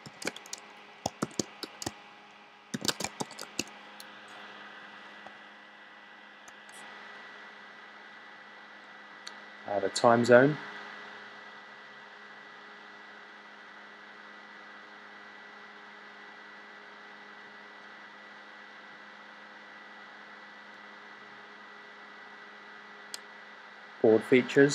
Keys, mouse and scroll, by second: 0.0-3.9 typing.